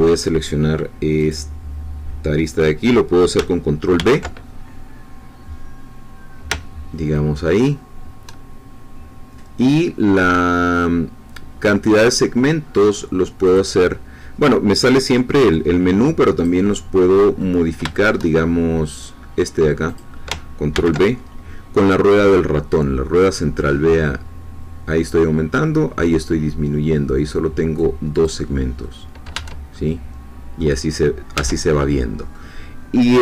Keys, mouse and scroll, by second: 1.3-3.3 drag, 3.9 ctrl+b, 13.4-14.8 drag, 16.3 click, 17.4-18.6 middle drag, 19.9 click, 20.7 ctrl+b, 23.9-24.2 scroll up 2, 24.6-25.0 scroll up 2, 25.0-26.3 scroll down 4, 25.5 middle click, 26.3 middle click, 28.1 click, 29.3 Tab, 29.7 middle click, 29.9-31.3 drag, 31.3 Tab, 31.7 click, 32.0 middle click, 32.2 click.